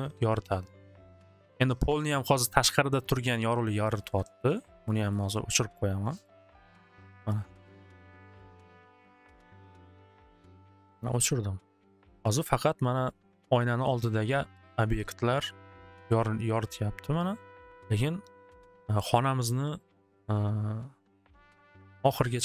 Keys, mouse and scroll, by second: 3.0 click, 4.1 alt+w, 4.3 alt+w, 5.3 middle click, 6.2 click, 7.0 click, 7.7 click, 9.0 alt+w, 9.3 alt+w, 11.9 click.